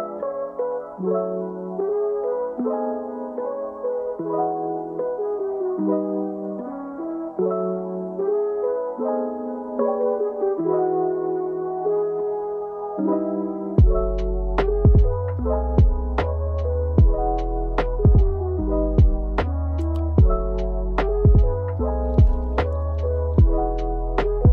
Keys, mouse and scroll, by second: 3.0 r, 4.1 KP_1, 4.4 KP_8, 4.9 KP_0, 5.9 Return, 7.0 i, 11.0 click, 14.4 shift+Left, 17.1 i, 20.0 click, 21.0 click, 24.4 r.